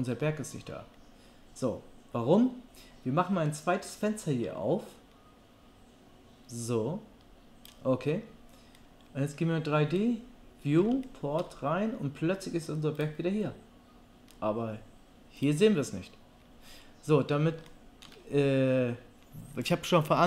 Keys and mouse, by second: 4.0-13.0 drag, 13.0-15.4 middle drag, 15.4-16.8 drag, 16.8-20.2 middle drag.